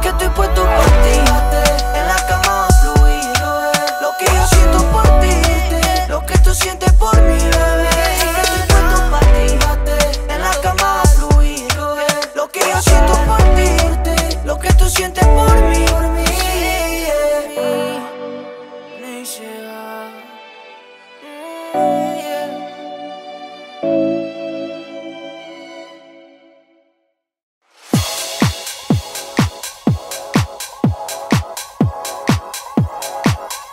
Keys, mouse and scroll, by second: 2.1 v, 2.4-4.6 drag, 24.2 scroll down 1, 24.7 scroll up 1, 25.9 scroll down 1, 27.7-30.5 drag.